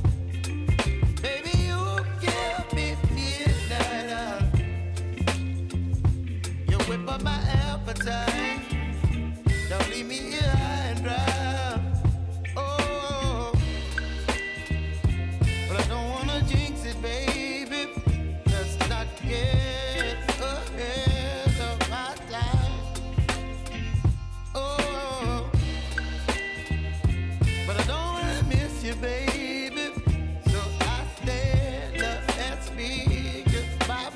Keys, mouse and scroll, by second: 0.2 F9, 1.4-5.0 drag, 5.2 space, 7.4 click, 7.8 F4, 9.4-11.5 drag, 11.5 space, 14.4 space, 14.9 click, 15.4 space, 16.2 click, 16.7 shift+click, 17.5 [, 18.0 space, 19.6 [, 20.0 space, 22.0 space, 22.6 click, 23.9-24.8 typing, 25.2 right click, 27.4 click, 31.5 s, 32.1-33.6 drag, 33.9 space.